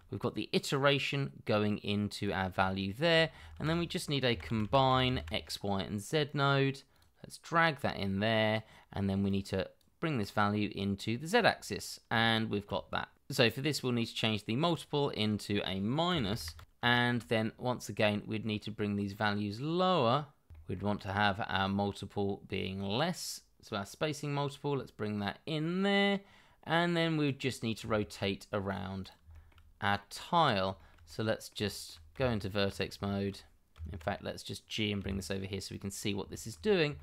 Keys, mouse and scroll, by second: 2.6 shift+middle click, 3.5-5.2 typing, 12.3 shift+middle click, 13.2 shift+middle click, 15.0 -, 15.1 Return, 16.6 scroll up 1, 16.8 shift+middle click, 20.5 shift+middle click, 20.9-22.9 scroll up 1, 27.6 scroll down 1, 27.8 shift+middle click, 29.0 double click, 29.3 shift+middle click, 29.7 scroll down 1, 29.9 middle click, 30.7 shift+middle click, 31.0 middle click, 31.6 shift+middle click, 32.1 Tab, 33.0 shift+middle click, 33.7 Tab, 35.0 g, 35.9 scroll up 1, 36.3 shift+middle click.